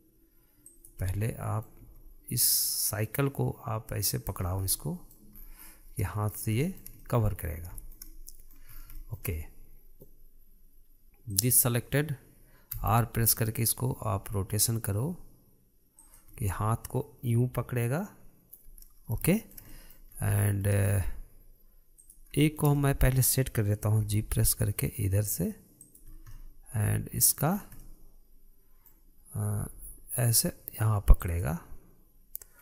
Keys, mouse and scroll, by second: 1.6-2.4 middle drag, 2.4 g, 5.0 scroll down 2, 5.2-5.9 middle drag, 5.9-6.6 scroll up 5, 6.6-9.3 middle drag, 9.3 scroll up 2, 9.5-11.9 shift+middle drag, 11.9 click, 13.3 r, 16.9 scroll down 1, 17.1-20.7 middle drag, 20.7 scroll up 2, 20.9-22.5 shift+middle drag, 22.5 click, 23.0-24.7 shift+middle drag, 24.7 g, 26.6 scroll down 1, 26.9-28.1 middle drag, 28.1-28.4 scroll up 4, 28.4-30.1 middle drag, 30.1 g.